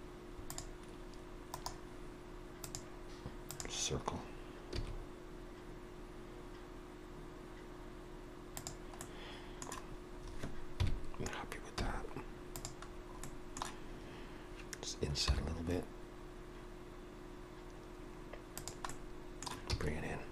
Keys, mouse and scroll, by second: 1.6 right click, 4.8 s, 8.9 middle click, 9.9-10.8 scroll down 3, 10.8 KP_Decimal, 11.8 z, 12.9 scroll down 2, 13.2 middle click, 15.3 i, 18.9 middle click, 19.7 e.